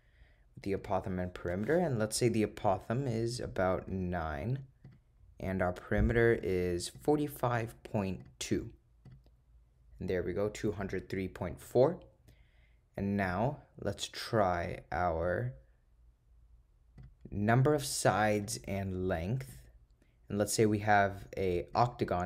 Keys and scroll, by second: 0.9 Return, 4.0 9, 4.9 Return, 6.5 4, 7.0 5, 7.6 ., 8.3 2, 9.1 Return, 15.3 Return, 17.0 Return, 18.4 Down, 19.6 Return, 21.8 8.